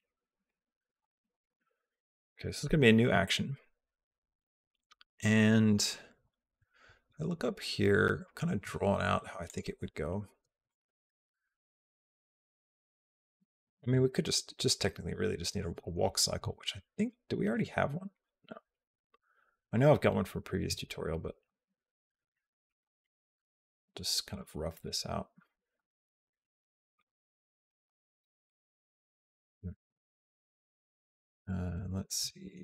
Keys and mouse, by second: 9.3 click, 10.5 click, 11.2 click, 16.8 click, 17.3 click, 18.3 click, 21.3 g, 22.6 g, 25.3 g, 27.5 g, 32.1 r.